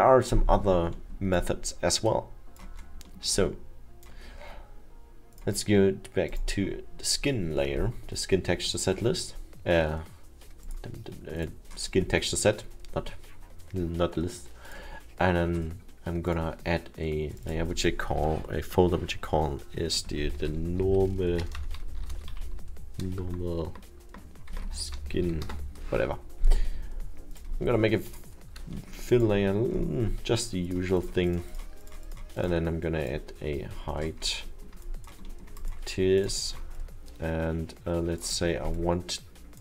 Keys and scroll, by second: 20.4 shift+n, 21.6-23.1 typing, 24.5-25.7 typing, 27.1 Return.